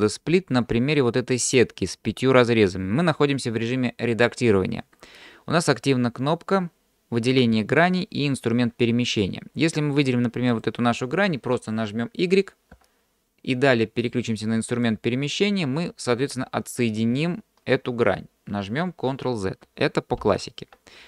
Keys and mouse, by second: 10.6 click, 12.8 y, 14.9 click, 19.7 ctrl+z, 20.2 ctrl+z.